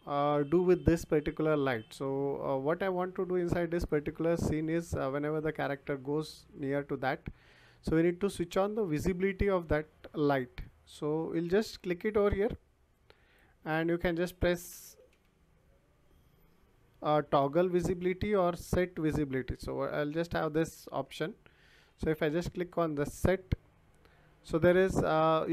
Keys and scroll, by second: 15.0 s, 18.6 e, 21.0 BackSpace, 21.8 t.